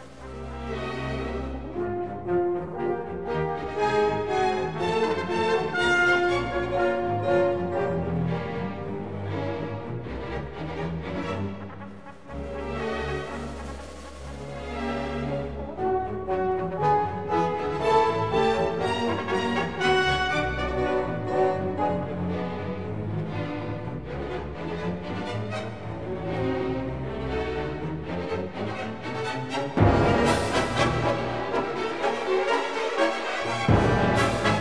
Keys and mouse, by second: 0.1 g, 4.2 click, 5.2 KP_Decimal, 7.7 Tab, 9.2 alt+z, 9.8 3, 10.6 KP_1, 11.2 KP_3, 13.4-13.7 shift+drag, 14.9-16.2 shift+drag, 17.2-20.0 ctrl+KP_Add, 20.8 ctrl+KP_Subtract, 21.8 alt+z, 23.4 e, 24.0 click, 24.7 alt+s, 27.1 click, 29.3-31.4 drag, 30.2 KP_0, 32.9 Tab, 33.9 ctrl+2.